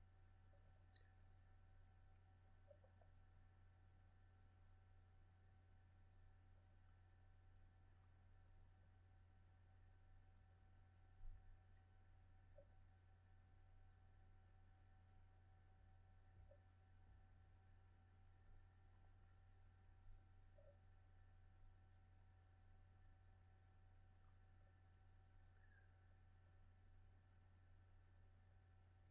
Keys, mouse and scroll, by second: 7.4 a, 8.8 c, 10.1-12.0 drag, 12.5 Escape, 13.4 q, 14.3 a, 15.0 c, 16.4-18.4 drag, 19.2 a, 20.4 c, 21.7-24.7 drag, 26.5 a, 27.2 c, 28.5-29.1 drag.